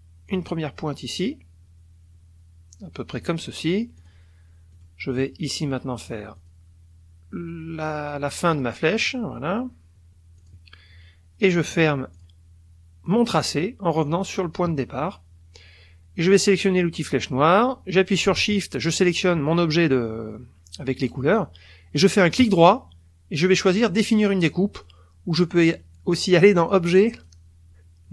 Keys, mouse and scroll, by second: 0.3 click, 3.1 click, 4.0 click, 4.7 click, 6.4 click, 8.5 click, 10.4 click, 12.1 click, 13.1 click, 17.0 click, 18.9 shift+click, 22.4 right click, 26.6 click, 27.1 click.